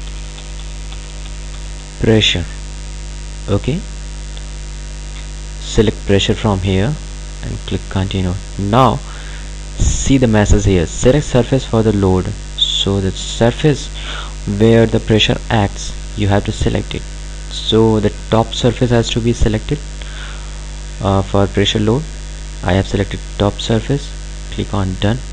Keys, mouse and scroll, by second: 0.0-2.1 typing, 6.3 click, 18.5 click, 24.5 click.